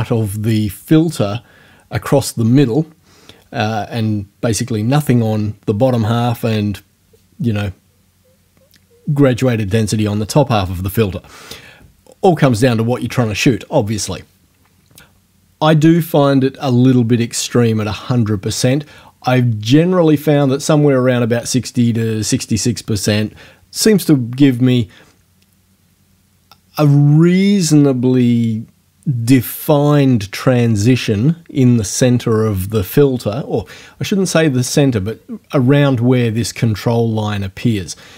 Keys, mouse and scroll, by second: 20.4 click.